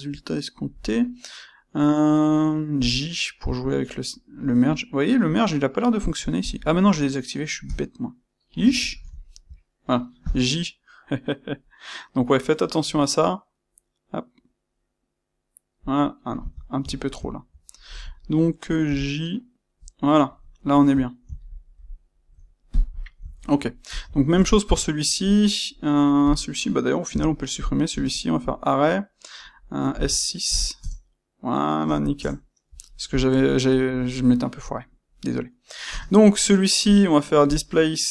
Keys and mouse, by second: 9.3-13.2 middle drag, 16.5 ctrl+middle drag, 22.7 click, 22.9-23.8 shift+middle drag, 23.8 click, 24.1-26.2 ctrl+middle drag, 26.2 click, 27.0 x, 27.5 click, 27.8 space, 32.1 KP_Enter, 33.0 click, 35.8 space.